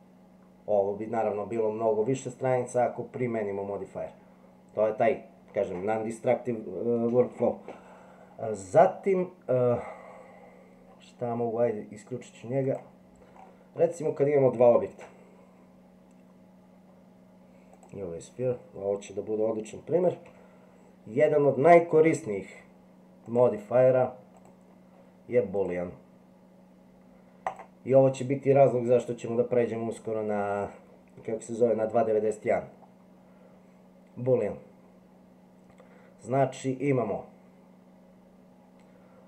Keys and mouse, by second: 12.6 click, 14.9 shift+a, 20.2 g, 23.2 click, 24.3 click, 25.7-27.5 drag.